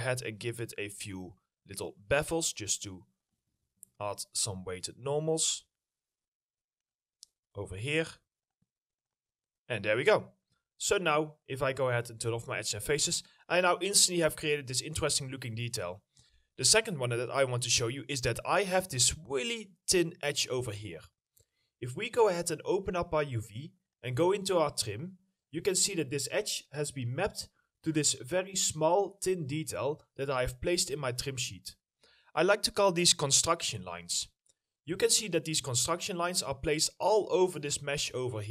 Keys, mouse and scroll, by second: 1.0 scroll up 1, 1.8 alt+middle click, 9.3-9.7 scroll down 1, 9.8 middle click, 9.9 scroll down 1, 10.2 alt+middle click, 12.8 middle click, 15.9 alt+middle click, 16.0 alt+scroll down 1, 16.3 middle click, 18.2 middle click, 18.8 alt+middle click, 19.3 scroll up 1, 25.7 middle click, 26.1-27.4 scroll up 1, 27.4 middle click, 28.7 scroll down 1, 30.4 middle click, 34.5 middle click, 34.7 scroll down 1, 35.4 middle click, 35.9 alt+middle click.